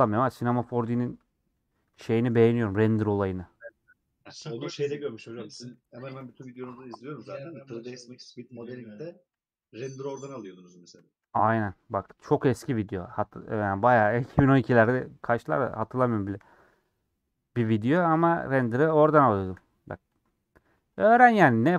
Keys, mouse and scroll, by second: 0.1 Tab, 0.5-1.2 scroll down 7, 2.4 scroll down 1, 5.3 click, 6.1 /, 6.5 middle click, 7.2 Tab, 7.3 scroll up 1, 7.7 3, 7.9-9.7 drag, 9.7 ;, 10.1 middle click, 10.5 scroll down 1, 10.7 middle click, 11.2 scroll up 2, 11.5 middle click, 11.7-12.1 scroll up 2, 12.1 shift+middle click, 12.8-14.6 drag, 14.6 ;, 15.0 scroll down 1, 15.1 middle click, 15.5 scroll down 1, 15.6 middle click, 16.6 alt+click, 17.0-17.3 scroll down 2, 17.4 middle click, 18.1 scroll down 2, 18.5 middle click, 18.7-19.2 scroll up 3, 19.2-20.3 shift+middle drag, 20.3 click, 21.1 click.